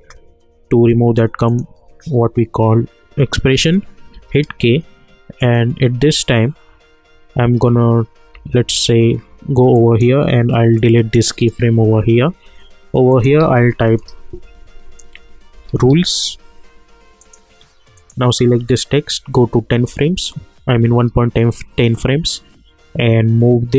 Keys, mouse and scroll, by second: 4.1 k, 5.4 click, 8.3 j, 9.7-13.1 drag, 13.4 ctrl+a, 14.4-16.4 typing, 17.2 click, 21.9-23.7 drag.